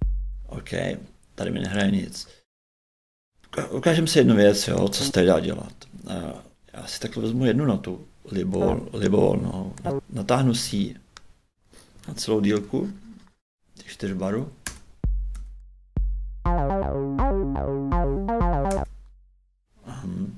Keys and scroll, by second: 0.2 shift+space, 14.6 shift+space, 18.7 shift+space.